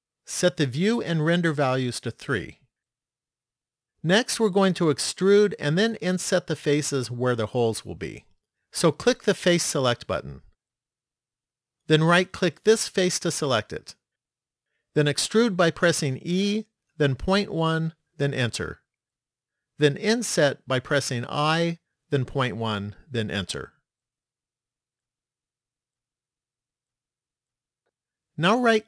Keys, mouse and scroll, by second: 1.6 click, 2.1 click, 3.0 click, 10.5 click, 13.4 right click, 16.2 e, 21.2 i, 26.0 middle click.